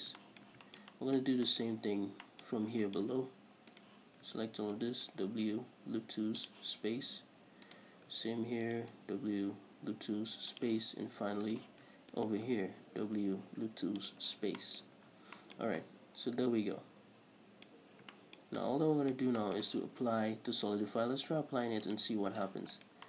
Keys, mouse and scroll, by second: 0.0 w, 0.3 scroll down 2, 0.6 shift+middle click, 1.3-4.1 middle drag, 2.9 scroll up 2, 4.1 right click, 5.2 ctrl+right click, 5.4 w, 8.0 right click, 9.1 ctrl+right click, 9.3 w, 11.9 right click, 12.5 ctrl+right click, 13.0 w, 14.8 scroll down 2, 15.0-22.2 middle drag, 15.2 a, 15.5 scroll down 2, 16.0 Tab, 18.2-18.5 scroll up 2, 22.2 click.